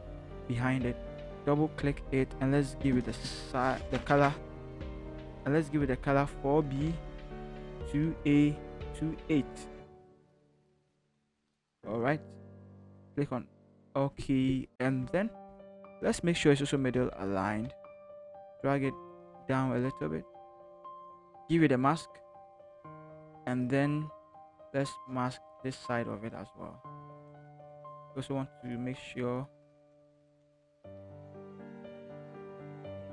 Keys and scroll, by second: 6.6-10.9 typing, 15.7 ctrl+t, 16.9 shift+Right, 17.7 shift+Up, 18.2 Up, 19.4 shift+Down, 21.1 shift+Return, 23.2 b, 30.9-31.9 typing.